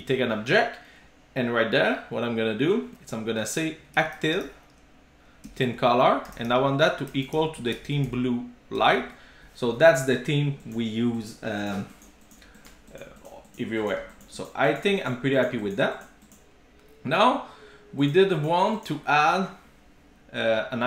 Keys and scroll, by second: 5.5 Return, 8.9 Return, 9.1 super+s.